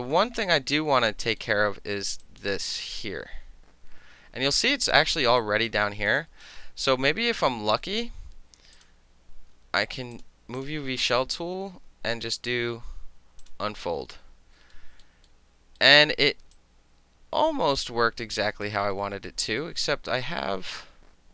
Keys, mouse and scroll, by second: 0.5 alt+middle click, 1.4-2.2 alt+middle drag, 2.2 alt+click, 2.3 alt+right click, 2.4-5.1 alt+middle drag, 5.2 alt+middle click, 5.4 alt+right click, 5.7 alt+middle click, 6.1 alt+middle click, 6.2 alt+right click, 6.4-8.7 alt+middle drag, 8.7 click, 8.8-10.1 middle drag, 10.1 click, 10.6 click, 13.4 click, 14.7 alt+middle click, 15.8 alt+middle click, 16.5-18.6 alt+drag, 18.6 alt+middle click, 19.3 alt+middle click, 19.8-20.8 alt+middle drag, 20.8-21.3 alt+drag.